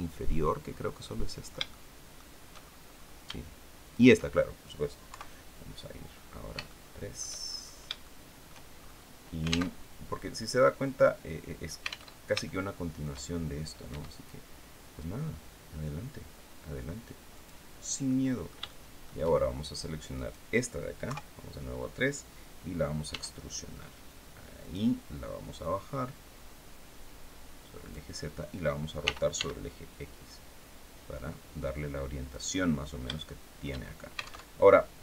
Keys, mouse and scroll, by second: 0.7-2.0 middle drag, 2.2-2.9 shift+scroll up 3, 3.6 shift+right click, 4.8 KP_3, 5.5-6.2 scroll down 4, 6.3 shift+middle click, 7.1-7.6 shift+scroll up 3, 7.7 shift+middle click, 8.4-8.8 shift+scroll up 1, 9.4 alt+Tab, 11.8 alt+Tab, 12.1 alt+shift+middle click, 13.5 e, 17.0 click, 17.7-18.9 middle drag, 19.8 right click, 20.7 KP_3, 22.7 e, 24.3 click, 25.3-27.8 drag, 28.7 r, 29.0 x, 32.0 click, 32.8 shift+middle click, 34.1 alt+Tab.